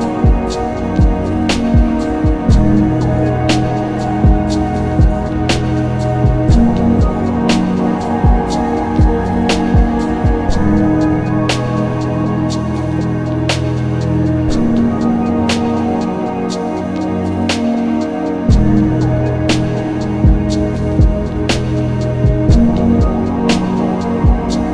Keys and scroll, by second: 2.8 ctrl+z, 7.4 ctrl+z, 9.0 ctrl+z, 12.2 ctrl+z, 14.0 ctrl+z.